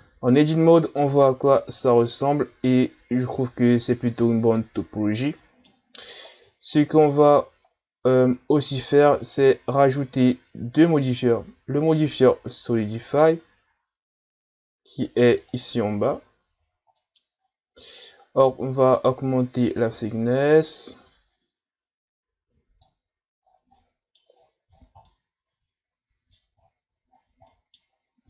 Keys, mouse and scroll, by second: 0.3-1.1 scroll up 5, 1.1-1.5 scroll down 4, 2.0-5.1 middle drag, 6.2-6.9 shift+scroll up 5, 8.6 click, 9.5 Tab, 10.9-14.8 drag, 16.0-16.9 shift+scroll up 9, 16.9-17.3 middle drag, 17.3-19.8 scroll up 3, 19.8-22.7 drag, 23.5 scroll down 2, 23.8-24.4 middle drag, 24.4-25.1 scroll down 2, 25.1-26.6 middle drag, 26.6-27.5 ctrl+scroll up 5, 27.5 middle click, 27.9 scroll up 3.